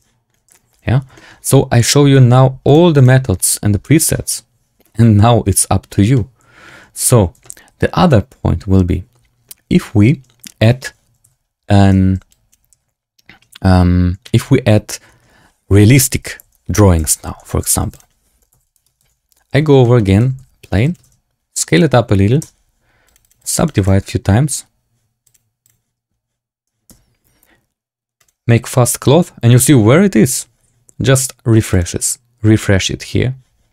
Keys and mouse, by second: 0.7 z, 1.1 shift+drag, 2.8 click, 4.7 click, 6.1 click, 7.3 a, 11.1 x, 12.6 shift+c, 16.9 shift+a, 18.4 r, 18.9 KP_1, 19.6 KP_Decimal, 19.7 shift+click, 20.1 s, 20.9 ctrl+a, 22.3 Tab, 23.0 click, 23.3 click, 23.7 click, 25.6-26.8 drag, 26.8 Tab, 31.6 click.